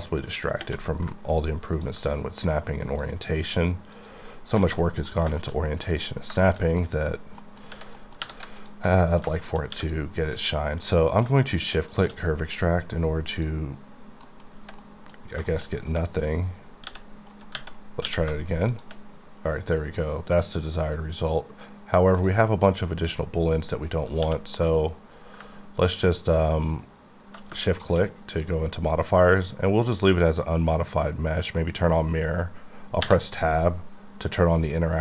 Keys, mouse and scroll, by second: 1.9 click, 4.3-4.6 scroll down 5, 4.6 alt+a, 4.8 middle click, 5.1 scroll down 1, 5.4 shift+middle click, 8.0 middle click, 8.2 3, 8.6 alt+click, 9.0 middle click, 9.4 shift+middle click, 9.7 q, 11.9 shift+click, 14.3 middle click, 14.8 middle click, 15.4 shift+middle click, 15.7 scroll up 2, 16.9 g, 17.3 right click, 18.0 q, 18.7 shift+click, 22.6 click, 25.5 ctrl+Num_Lock, 27.6 shift+q, 27.8 shift+click, 28.5 scroll up 1, 29.2-29.9 scroll down 1, 29.9-31.1 scroll down 1, 31.1-32.6 scroll up 1, 34.7 click.